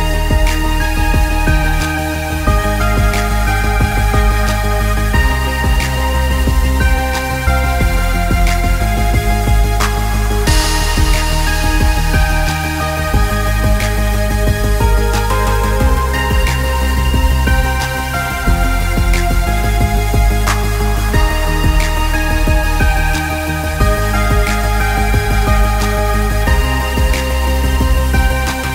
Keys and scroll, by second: 1.0 ctrl+space.